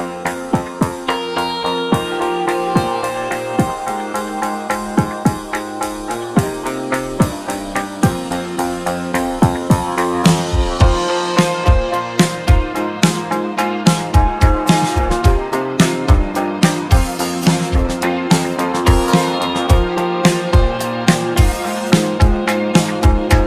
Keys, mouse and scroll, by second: 1.2 ctrl+z, 1.5 ctrl+z, 1.8 ctrl+z, 2.2 ctrl+z, 3.2-3.6 scroll down 2, 3.6-4.5 scroll up 1, 4.5 g, 6.6 Tab, 8.6 Tab, 9.7 click, 10.4 click, 16.3 Tab, 17.2 a, 18.2 shift+d, 22.8 p.